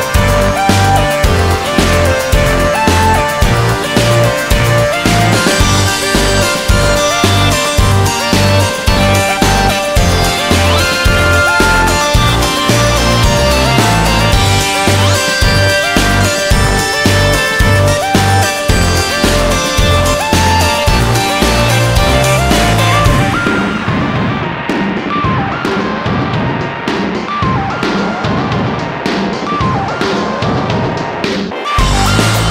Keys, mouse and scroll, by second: 0.8 click, 1.2 middle click, 1.3 scroll up 1, 1.6 middle click, 1.9 scroll up 1, 6.6 middle click, 7.0 middle click, 8.3 scroll down 1, 8.6 middle click, 10.2 click, 12.3 click, 12.9 middle click, 13.0 scroll up 1, 14.5 scroll down 1, 15.2 scroll down 1, 16.3 alt+middle click, 20.0 alt+middle click, 24.6 f, 25.5 middle click, 25.5 z, 26.4 middle click, 26.9 middle click, 27.9 click, 29.0 middle click, 29.9 middle click, 29.9 scroll down 1, 31.5 click.